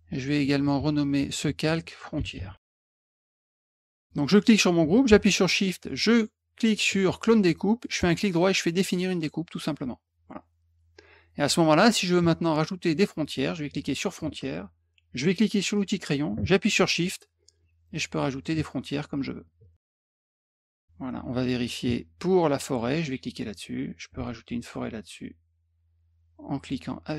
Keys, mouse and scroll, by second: 0.3 click, 1.0 click, 1.2 click, 1.9-3.4 typing, 4.0 click, 6.5 shift+click, 8.0 right click, 9.5 click, 12.9 click, 15.7 click, 17.6 shift+click, 19.4 shift+click, 20.3 shift+click, 22.6 click, 24.2-26.7 shift+drag.